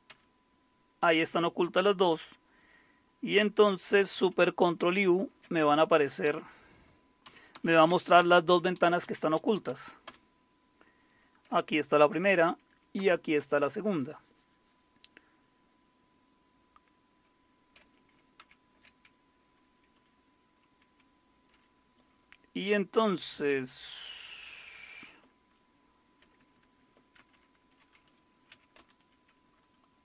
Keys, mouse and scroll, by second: 4.6 ctrl+super+u, 5.9 Down, 6.2 Up, 7.2 Down, 7.5 Up, 7.9 Down, 8.2 Up, 8.5 Down, 8.7 Up, 9.0 Down, 9.7 Up, 10.0 Return, 12.0 ctrl+super+u, 13.0 Return, 18.4 ctrl+super+o, 19.9 Down, 26.2 Escape, 26.4 Escape, 26.6 Escape, 26.8 Escape, 27.2 shift+;, 28.3-29.0 typing.